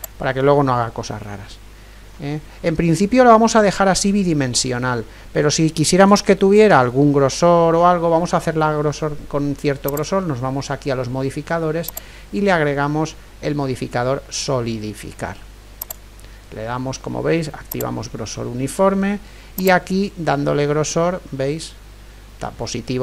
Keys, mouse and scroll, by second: 1.3-9.9 middle drag, 9.9-15.9 drag, 17.7-21.4 drag.